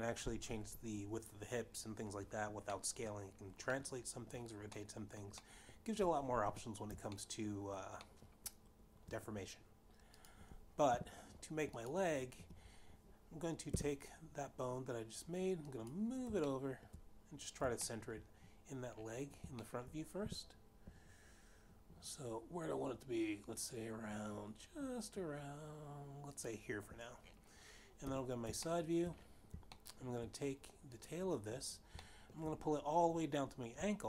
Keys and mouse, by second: 3.0 middle click, 4.3 middle click, 5.2 middle click, 5.8 middle click, 6.5 3, 7.5 shift+middle click, 8.3 shift+middle click, 10.5 click, 11.1 g, 12.0 click, 12.8 1, 14.3 g, 16.1 click, 17.0 shift+middle click, 18.3 shift+middle click, 20.0 shift+middle click, 20.5 g, 26.3 click, 28.3 3, 29.2 shift+middle click, 30.2 shift+middle click, 31.3 click, 32.5 shift+middle click.